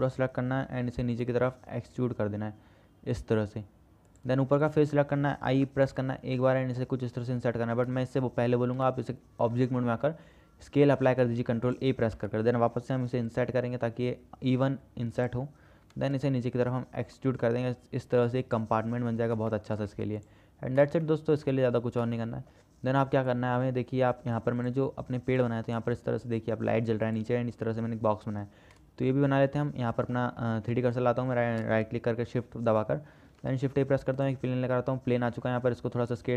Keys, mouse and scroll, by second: 1.3 e, 4.9 click, 6.2 i, 9.0 Tab, 10.2 ctrl+a, 12.5 Tab, 13.4 i, 16.1 e, 20.0 shift+click, 20.1 Tab, 20.4 click, 21.3 shift+drag, 22.4 shift+click, 33.4 shift+a, 35.5 s.